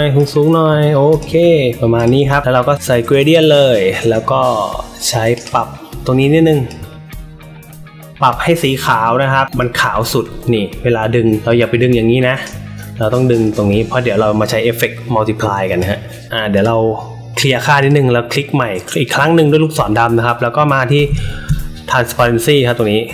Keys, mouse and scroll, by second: 0.1 click, 1.0 click, 1.9 click, 3.2 click, 5.3 click, 6.6-9.5 drag, 11.4 click, 13.4-15.7 drag, 16.5 click, 17.7 click.